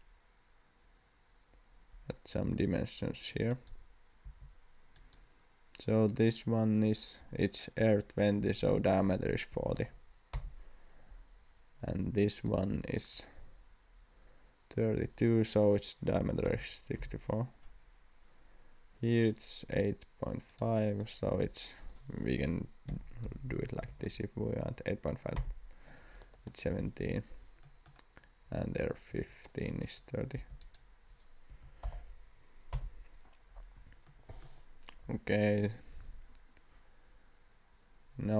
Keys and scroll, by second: 4.2 d, 9.3-10.2 typing, 10.3 Return, 16.1 6, 16.4 4, 17.0 Return, 22.2-24.4 typing, 25.3 Return, 29.1 Escape, 30.3 d, 31.5 3, 31.8 0, 32.7 Return, 33.7 Escape.